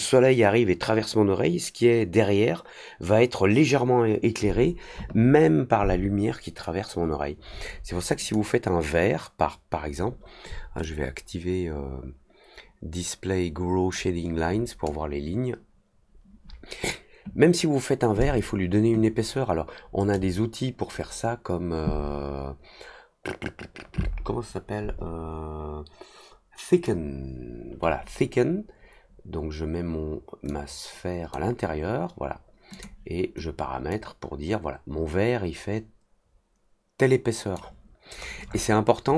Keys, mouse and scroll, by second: 8.1 click, 10.8-13.8 drag, 20.1-26.8 drag, 30.4 click, 32.7 click, 33.8-37.5 drag, 38.1-39.1 scroll up 3.